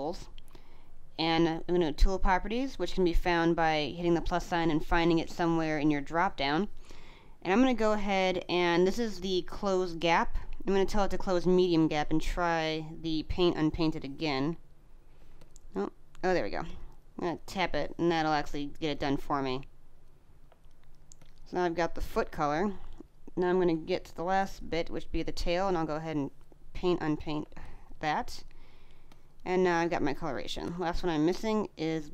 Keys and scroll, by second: 20.3 space, 24.1 space, 27.3 space.